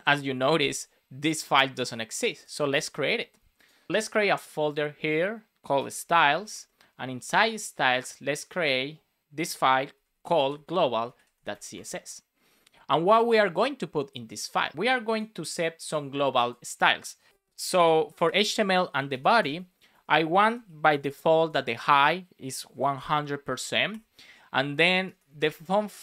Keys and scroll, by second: 6.5 Return, 11.7 Return, 18.2 Return, 19.3 space, 19.6 shift+[, 19.8 Return, 21.2 shift+;, 21.4 space, 22.9 shift+5, 23.8 Return, 25.1 BackSpace.